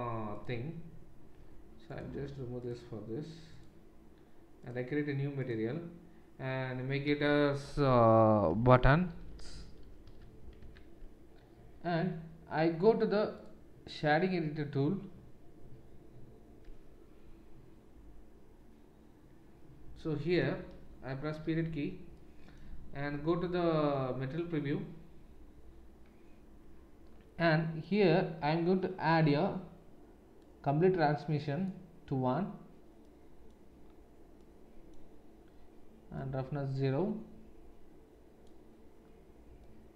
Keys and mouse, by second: 0.3-2.6 drag, 2.6 middle click, 3.5-13.4 drag, 9.1 t, 16.6-23.1 middle drag, 21.3 KP_Decimal, 23.1 z, 26.1-30.3 middle drag, 30.3-39.9 drag.